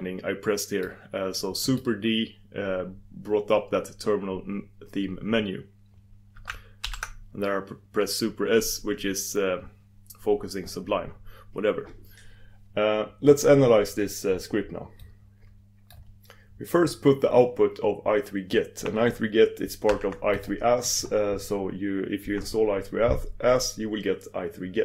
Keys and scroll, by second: 6.8 super+s, 20.3 super+s.